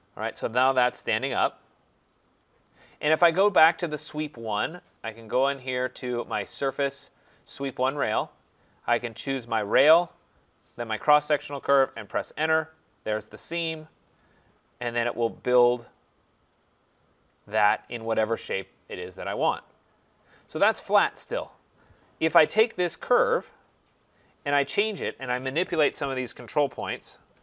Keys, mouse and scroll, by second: 2.4 right click, 2.8 click, 6.8 click, 8.0 click, 9.6 click, 10.8 click, 12.0 Return, 13.6 Return, 16.0 click, 16.4 middle click, 16.5 middle click, 16.6 middle click, 17.5-18.0 scroll, 17.6 right click, 19.5-19.8 scroll, 21.3 click, 22.1 Delete, 24.1 click, 25.4 click, 27.0 shift+click.